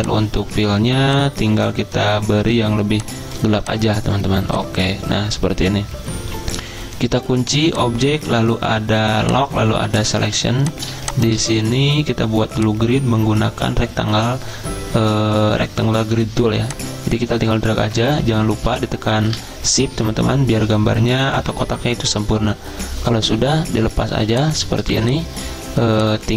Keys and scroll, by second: 10.2 z, 24.1 z, 24.8 v.